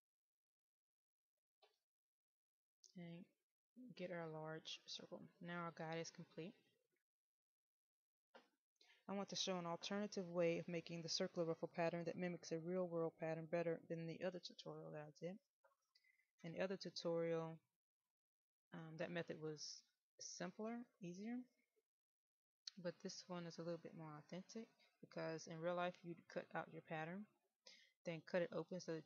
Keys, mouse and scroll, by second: 3.1 middle click, 7.4 click.